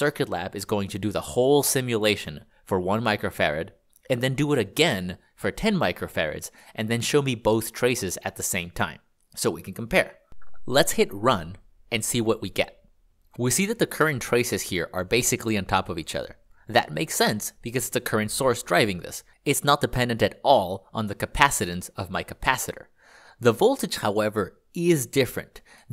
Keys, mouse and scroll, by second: 20.3-23.0 ctrl+d.